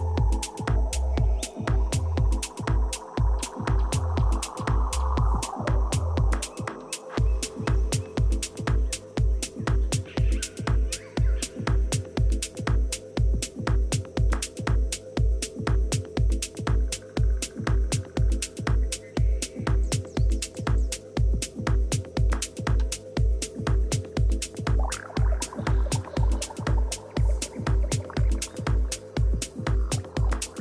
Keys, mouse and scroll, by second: 0.0 ctrl+z, 0.7-3.2 middle drag, 1.4 a, 6.2 click, 7.6 e, 8.3 right click, 12.2 a, 13.3-15.2 drag, 14.7 b, 20.4 ctrl+z, 20.8 ctrl+z, 21.2 ctrl+z, 21.6 ctrl+z, 22.0 ctrl+z, 22.9 ctrl+z, 24.2 a, 24.7 a, 25.4 right click, 26.1 z, 27.2 a, 28.7 a, 29.7 b.